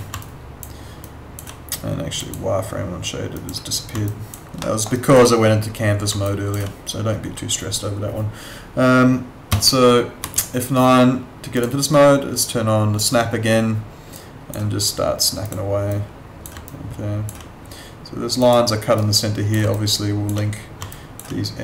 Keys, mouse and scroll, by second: 0.2 alt+click, 4.1 alt+click, 4.6 alt+middle click, 4.9 alt+right click, 6.2 alt+click, 9.5 F10, 10.2 F9, 11.5 click, 16.7 alt+click, 19.7 alt+click, 20.9 alt+click.